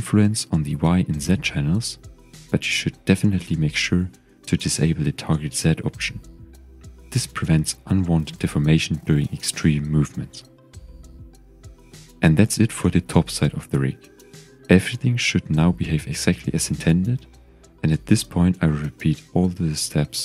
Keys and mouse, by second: 2.2 click, 2.9 click, 3.9 click, 4.5 click, 5.0 click, 7.4-7.9 middle drag, 8.8 click, 9.4-10.3 middle drag, 10.8-11.2 shift+middle drag, 13.2 click, 14.0 g, 14.1 x.